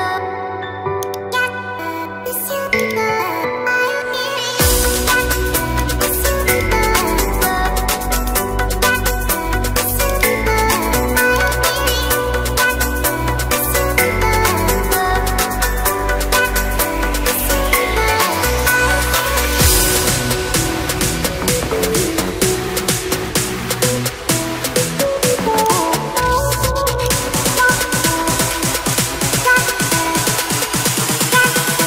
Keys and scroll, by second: 28.1 ctrl+z.